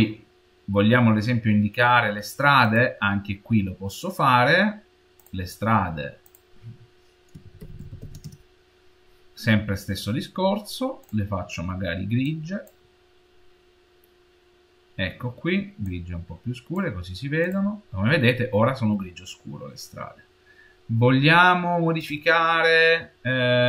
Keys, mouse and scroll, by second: 5.0 click, 6.1 click, 9.9-10.9 scroll down 1, 10.9 click, 17.3-20.3 drag, 21.9 click.